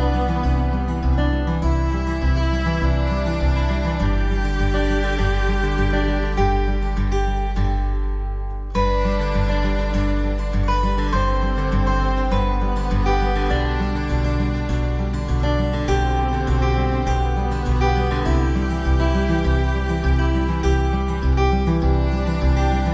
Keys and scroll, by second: 1.0 ctrl+t, 2.8 ctrl+t, 3.0 ctrl+e, 6.0-7.3 typing, 10.5 x, 11.1 x, 12.2 x, 13.3 x, 13.6 x, 15.7-17.5 typing, 18.5-21.4 typing, 22.6 typing.